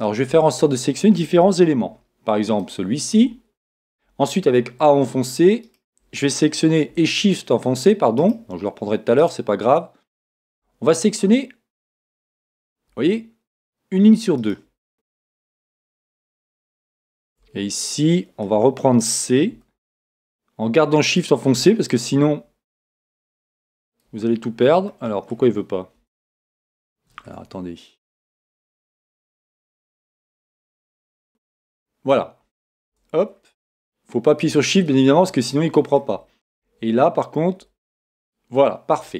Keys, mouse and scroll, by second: 1.9 c, 5.6-7.5 right drag, 10.3-11.9 right drag, 11.1-12.9 middle drag, 14.4-17.4 right drag, 17.9-19.9 middle drag, 19.5 c, 27.0-29.8 middle drag, 28.9 c, 33.2-38.2 middle drag, 37.6 c.